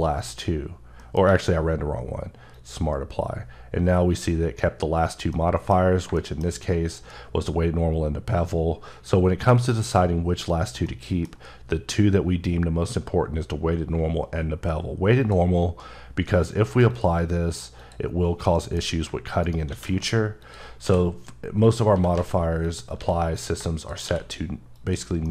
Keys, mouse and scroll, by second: 0.8 middle click, 1.0 q, 2.3 click, 5.1 middle click, 5.9 double middle click, 10.0-10.6 scroll down 2, 10.9 middle click, 15.0 click, 16.7 click, 18.3 middle click, 18.7 scroll up 1, 19.2 shift+right click, 19.5 shift+a, 20.2 click, 20.6 s, 21.4 click, 21.7 s, 21.9 z, 22.4 click, 22.8 s, 23.1 click, 23.8 q, 24.5 click, 25.0 middle click.